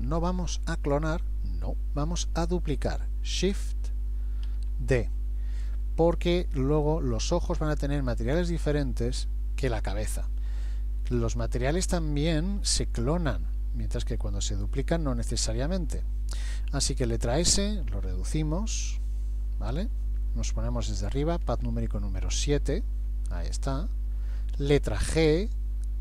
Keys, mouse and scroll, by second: 4.5 shift+d, 17.3 s, 21.7 KP_7, 23.1-24.3 scroll down 3, 23.8 shift+middle click, 25.2 g.